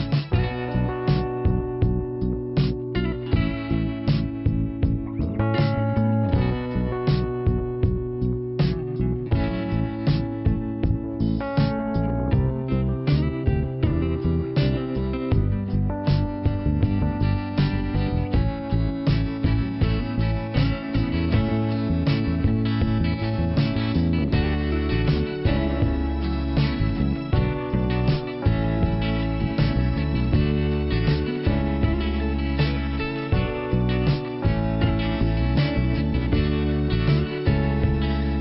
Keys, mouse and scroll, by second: 2.3 click, 4.2 click, 6.4 click, 8.0 click, 8.2 click, 10.4 click, 11.3 scroll up 1, 12.9 click, 13.4 click, 13.6 right click, 14.2 click, 15.3 click, 15.9 click, 16.5 click, 17.2 click, 18.2 click, 18.9 click, 19.8 click, 20.5 click, 21.2 scroll down 2, 23.5 middle click, 25.5 scroll up 2, 27.0 scroll down 1, 29.1 click, 29.7 click, 32.2 click, 32.9 click, 34.8 click, 35.5 click, 37.1 click, 38.2 click.